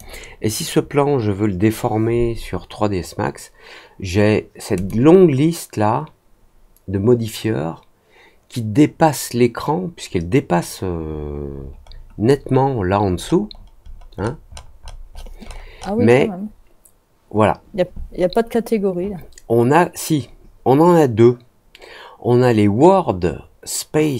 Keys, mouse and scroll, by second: 4.7 click, 10.9 middle click, 11.4 middle click, 11.8-12.5 scroll down 2, 12.7 scroll up 1, 13.0-14.0 scroll down 3, 14.1-15.0 scroll up 4, 15.0 scroll down 2, 15.1-15.9 scroll up 6.